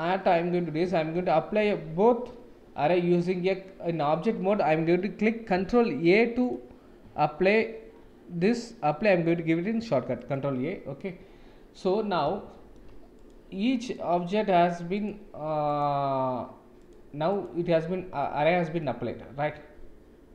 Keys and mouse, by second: 1.8 ctrl+a, 8.6-10.5 drag, 11.9 middle drag, 12.4 shift+middle drag, 13.1 click, 13.9 click, 14.9 click, 15.7 click, 16.8 click, 17.4 click, 18.2-18.7 middle drag.